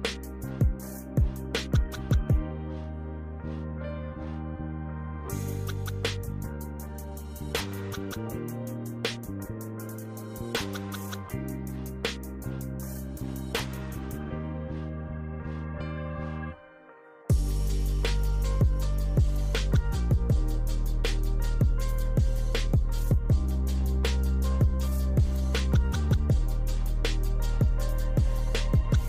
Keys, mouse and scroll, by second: 0.9 click, 1.7 Escape, 2.6 click, 3.6 click, 3.9 Escape, 4.5-5.6 drag, 5.9 Escape, 6.5 click, 7.3 click, 9.4 click, 9.8 click, 11.8 click, 12.3-12.7 drag, 14.1 click, 15.8 click, 16.6 click, 16.9 middle click, 17.7 click, 18.2 click, 18.8 click, 18.9-19.3 scroll up 2, 19.4 scroll down 1, 20.0 click, 20.5 click, 21.0 scroll down 1, 21.5 click, 21.8 scroll up 1, 22.1 scroll down 1, 22.3 scroll up 1, 22.5 scroll down 1, 23.0 click, 23.6 click, 24.9 scroll up 1, 25.7 click, 25.7 scroll up 1, 27.6 click, 28.2 click.